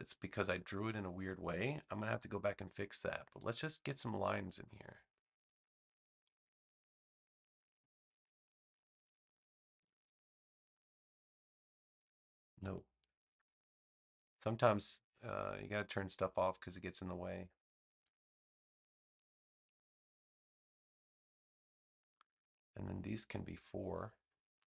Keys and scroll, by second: 2.0 BackSpace, 8.6 super+j, 9.7 v, 12.9 super+z.